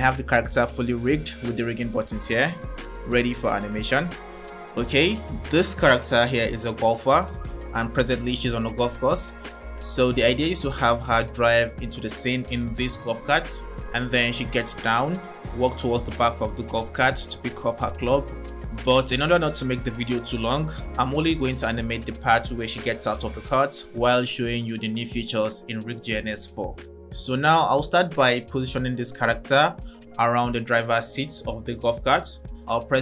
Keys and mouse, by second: 1.3 click, 3.5 click, 5.1 middle click, 15.1 click, 19.0 click, 20.7 drag, 21.9 click, 23.4 click.